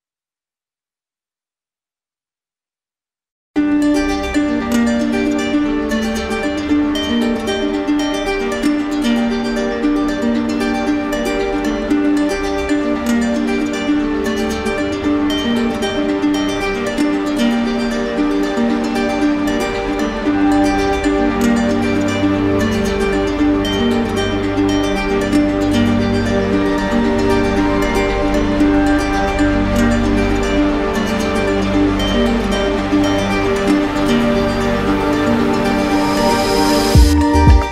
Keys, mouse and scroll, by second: 2.4-3.5 drag, 4.1-5.2 drag, 5.5-6.6 drag, 7.0-8.1 drag, 11.1 click, 11.9 alt+click, 13.1 alt+click, 16.2 alt+click, 17.5 click, 21.2 click, 22.5 click, 24.0 click, 25.2 click, 26.6 click, 29.2 click, 30.3 alt+click.